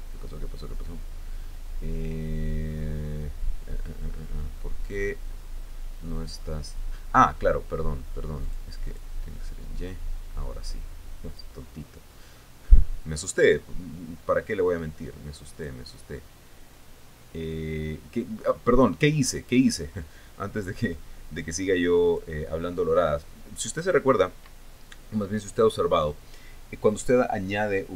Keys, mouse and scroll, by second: 0.1 Tab, 0.9-1.4 scroll up 2, 2.0 scroll down 2, 4.0-4.7 scroll down 2, 4.7 scroll down 1, 4.8-5.4 scroll up 2, 5.7-6.4 scroll down 4, 7.0 scroll up 2, 9.0 click, 9.5 click, 10.5-12.2 drag, 12.3-12.7 scroll down 2, 12.8 scroll down 2, 14.1-16.4 drag, 17.3-19.6 drag, 20.6-23.0 drag.